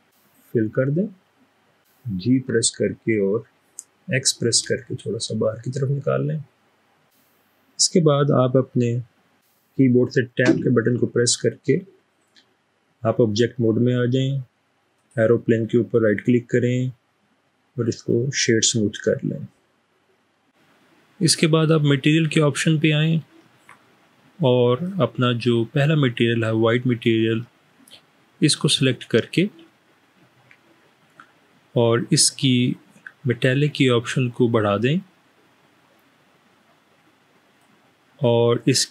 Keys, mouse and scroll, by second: 2.5 typing, 4.5 typing, 10.6 Tab, 14.9 right click, 18.0 click, 34.0-37.7 drag.